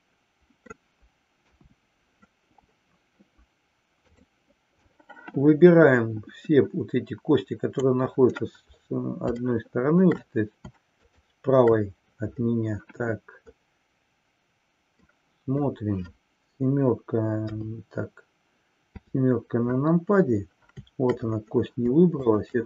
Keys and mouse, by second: 1.5 KP_1, 4.0-4.3 drag, 5.0-8.0 drag, 9.5-10.1 shift+middle drag, 11.0 shift+click, 15.1-15.7 middle drag, 17.5 KP_3, 22.2 shift+click.